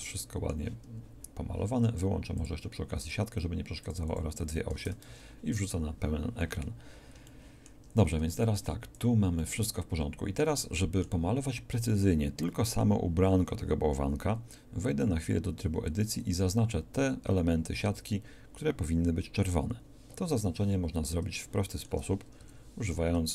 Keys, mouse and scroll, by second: 5.1 shift+space, 6.9 middle click, 15.2 Tab, 19.4 a, 20.3 KP_2, 20.8 z, 22.4 KP_1.